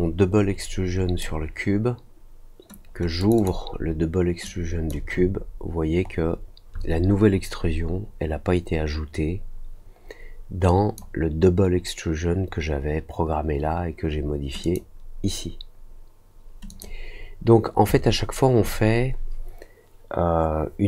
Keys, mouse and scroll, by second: 3.1 click, 3.3 click, 4.4 click, 5.3 alt+middle click, 5.9 alt+middle click, 6.4 alt+middle click, 10.6 click, 14.6 click, 16.6 click.